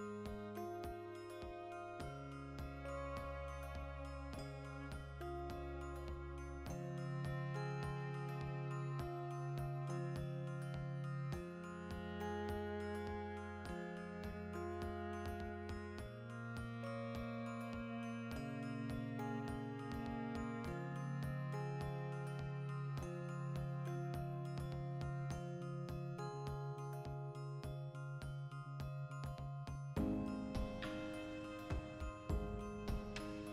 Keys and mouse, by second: 0.3 Tab, 0.6 a, 5.0 alt+h, 5.6 right click, 6.1 l, 6.2-11.7 ctrl+middle drag, 11.7 3, 11.9-13.9 alt+right drag, 13.9 ctrl+KP_Add, 14.6 alt+shift+right click, 14.9 x, 15.7 2, 15.9 alt+right click, 16.2 alt+q, 16.5-17.7 shift+middle drag, 17.1 e, 17.7 click, 18.0 ., 18.5 alt+q, 18.8 shift+middle click, 21.6-23.0 ctrl+middle drag, 22.0 e, 23.0 click, 23.0 middle click, 23.2 s, 23.9 click, 24.0-26.2 middle drag, 25.5 e, 26.2 click, 26.3 ctrl+middle click, 26.8 alt+right click, 26.9-28.1 middle drag, 27.9 3, 28.1 alt+right click, 28.5 i, 29.2 click, 29.3 middle click, 29.6 alt+right click, 29.8 shift+middle click, 30.4 2, 30.7 alt+right click, 31.4 middle click, 31.9 alt+shift+right click, 32.0-33.5 shift+middle drag.